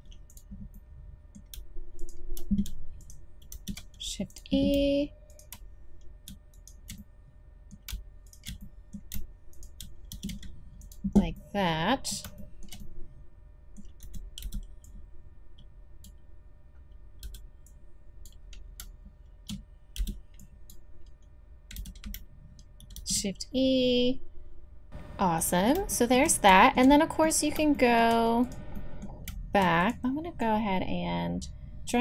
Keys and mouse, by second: 3.1 click, 3.5 shift+e, 4.3 click, 5.3-8.3 drag, 10.1 shift+e, 14.0 a, 14.4 b, 17.2 b, 20.0 b, 21.8 z, 23.0 shift+e, 24.9 a, 28.4 right click, 28.9-30.4 drag, 30.4-31.9 middle drag, 31.9-32.0 drag.